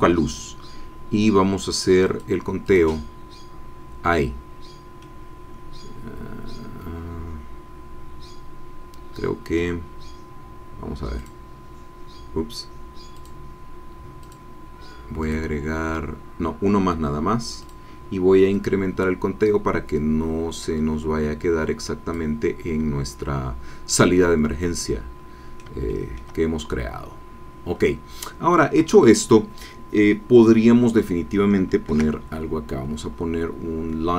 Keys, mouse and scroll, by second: 2.0 click, 2.7 click, 4.5-5.1 scroll down 2, 5.1-9.7 middle drag, 11.2 click, 13.1 click, 14.2 click, 15.2 click, 17.6 click, 18.5-22.3 drag, 23.9 click, 24.1 scroll down 1, 25.9 shift+middle click, 26.2 shift+scroll up 2, 26.9-27.3 scroll up 2, 27.3 scroll down 2, 31.9 shift+a.